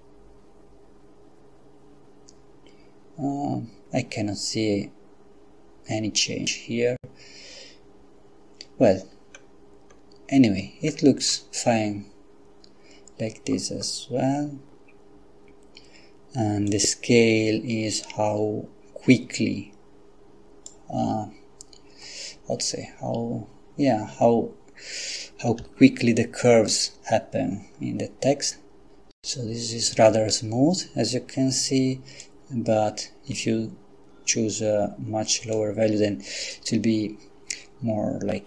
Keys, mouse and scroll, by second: 9.3-9.8 scroll up 2, 9.9-10.4 scroll up 2, 10.9-11.8 scroll down 2, 16.7-21.2 drag, 25.6 F12, 32.3-36.1 drag.